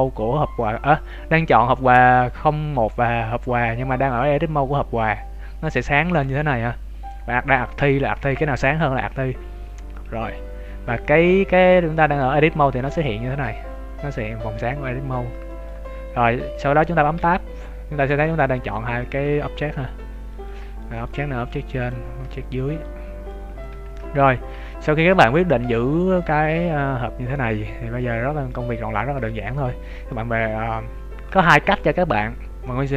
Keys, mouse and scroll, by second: 9.9-12.2 scroll up 1, 15.0-15.8 scroll down 2, 15.4 shift+middle click, 15.8-16.7 scroll up 1, 17.1 Tab, 17.6-17.9 scroll down 1, 17.9 middle click, 18.7 z, 19.0 middle click, 20.3 right click, 20.7 middle click, 21.4 click, 22.2 ctrl+z, 22.6 right click, 23.2 click, 23.8 ctrl+z, 24.1 scroll up 3, 24.3 z, 24.6 scroll down 2, 24.9 middle click, 28.6 z, 28.8 scroll up 1, 29.1 z, 29.5 Tab, 30.0 middle click.